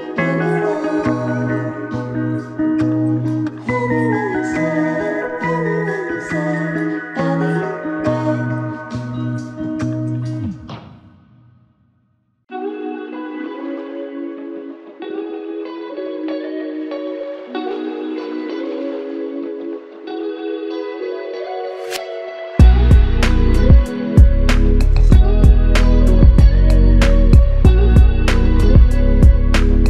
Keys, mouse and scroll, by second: 4.9 ctrl+alt+click, 6.3 alt+shift+click, 7.4 alt+click, 10.3 double click, 12.2 alt+click, 13.5 double click, 17.4 alt+click, 22.8 f, 24.5 alt+click, 26.3 double click, 27.5 alt+click.